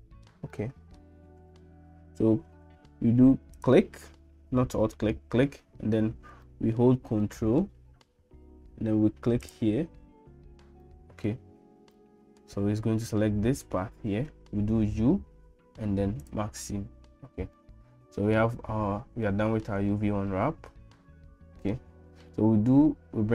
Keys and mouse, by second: 0.5 shift+middle click, 6.5 shift+middle click, 7.2 middle click, 9.4 ctrl+click, 10.8 shift+middle click, 12.0 shift+middle click, 14.8 u, 17.6 middle click, 19.2 shift+middle click, 19.9-21.7 middle drag.